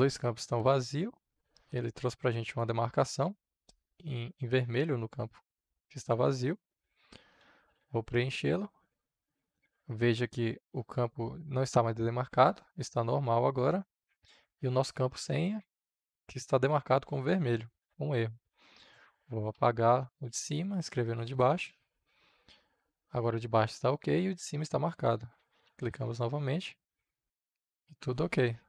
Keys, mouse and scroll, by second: 6.9-8.2 typing, 8.7-20.6 drag, 20.3-21.4 typing, 21.6-25.2 drag, 24.9-26.0 typing, 26.8-28.6 drag.